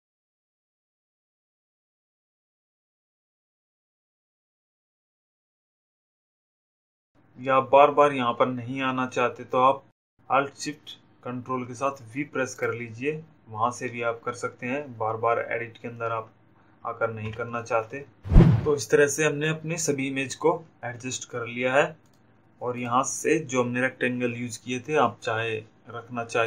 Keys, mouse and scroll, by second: 0.6 ctrl+click, 2.4 click, 13.1 click, 17.2 ctrl+t, 22.0 click.